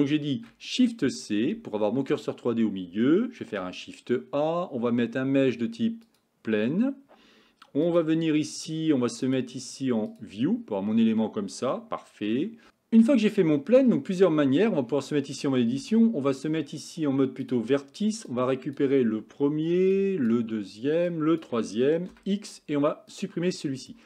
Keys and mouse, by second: 0.4 shift+c, 3.6 shift+a, 7.9 click, 9.4-10.3 drag, 13.2 Tab, 14.7 Tab, 17.6 click, 18.4 click, 20.2 shift+click, 21.3 shift+click, 22.2 x.